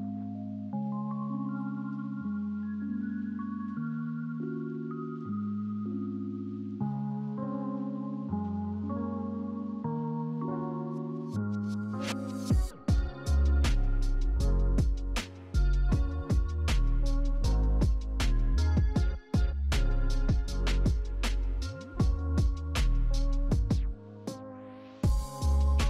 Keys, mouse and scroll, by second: 0.1 scroll down 1, 16.6 right click, 19.9 right click.